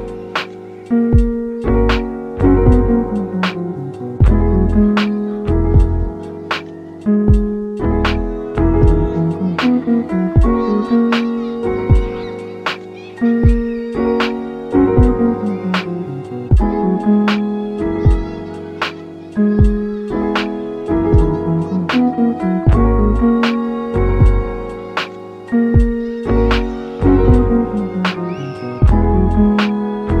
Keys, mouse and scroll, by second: 3.3 click, 4.7 click, 5.5-8.1 drag, 13.8-14.7 scroll down 5, 15.8-20.2 drag, 21.1-26.9 drag, 27.8 click, 28.9 click, 29.6 click.